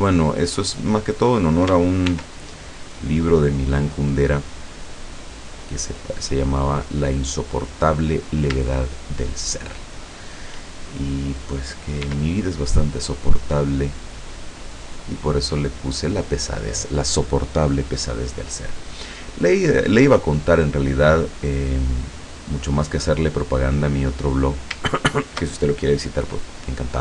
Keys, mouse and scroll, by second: 1.1 click, 2.2 ctrl+r, 2.8 click, 5.1 click, 6.5 click, 8.1 middle click, 8.8 shift+scroll up 1, 9.0-10.7 shift+middle drag, 12.0 e, 14.6 click, 23.2 click, 24.4 right click, 25.2 shift+right click.